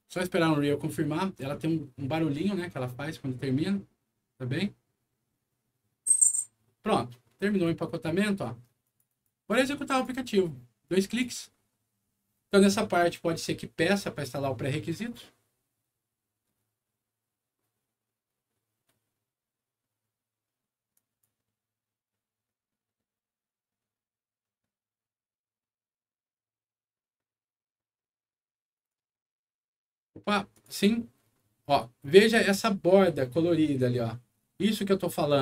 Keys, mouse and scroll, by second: 7.5 click, 8.8 click, 9.0 click, 9.9 click, 10.8 click, 11.0 click, 20.9 click, 28.7 click, 30.5 click.